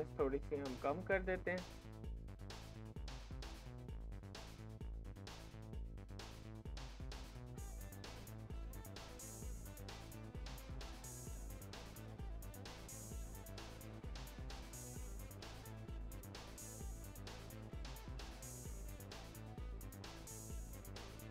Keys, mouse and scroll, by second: 0.7-12.1 drag.